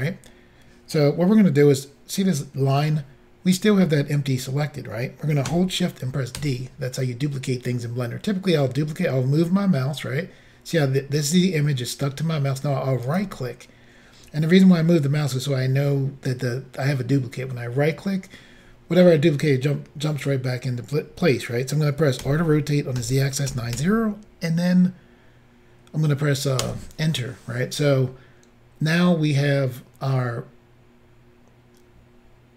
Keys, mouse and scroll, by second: 6.4 d, 13.1 right click, 22.2-23.8 typing, 26.6 Return.